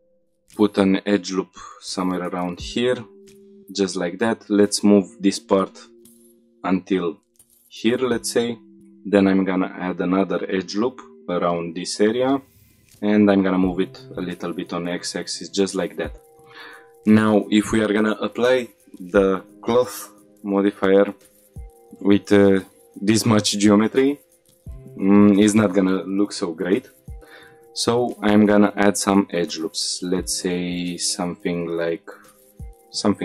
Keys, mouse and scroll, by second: 0.0 ctrl+r, 1.9 click, 2.2 click, 3.2 click, 3.8 shift+middle click, 4.2-4.5 scroll up 2, 4.5 g, 7.6 click, 7.9 middle click, 9.0 ctrl+r, 10.6 click, 11.8 click, 12.8 g, 13.1 x, 14.7 click, 15.1 middle click, 15.7 shift+middle click, 16.0 middle click, 16.8-17.1 scroll down 1, 17.1-18.7 middle drag, 21.5 middle click, 21.9 shift+middle click, 25.2 middle click, 25.2 scroll up 1, 27.7 ctrl+r, 33.0 right click.